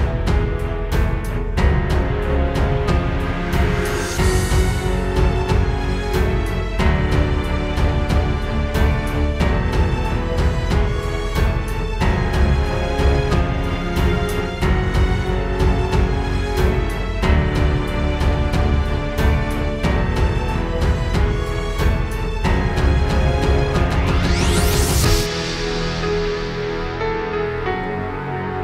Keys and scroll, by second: 0.8 super+z, 7.5 space, 11.3 space, 11.8 super+space, 15.0 space, 15.7 super+space, 16.2 super+space, 16.6 super+space, 16.8 super+space, 18.5 space, 19.0 super+space, 23.0 super+z, 27.1 space, 27.7 super+space.